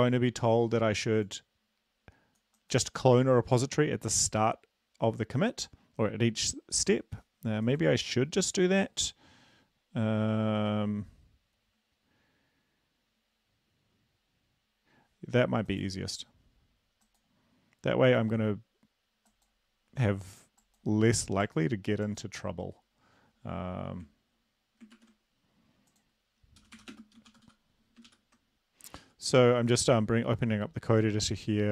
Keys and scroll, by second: 25.7 ctrl+`, 27.2-28.2 typing, 29.2 super+Up.